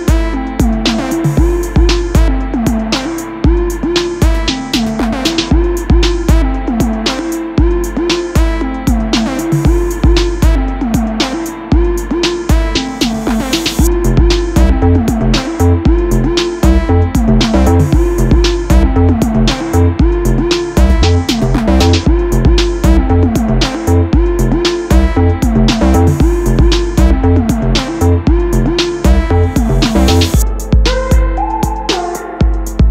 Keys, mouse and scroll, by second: 0.1 space, 0.6 space, 1.4 space, 1.9-4.1 middle drag, 4.1 click, 6.1 shift+a, 8.1 ctrl+a, 10.2 g, 11.9 KP_7, 13.0 s, 15.1 s, 17.6-17.9 scroll up 3, 17.9-18.6 middle drag, 18.6 scroll down 2, 19.2 right click, 20.3-20.7 scroll up 1, 22.7-24.4 drag, 24.4 ctrl+a, 25.0-25.8 middle drag, 25.8 KP_3, 26.6 scroll down 3, 28.3 d, 30.6 g, 32.5-32.9 middle drag.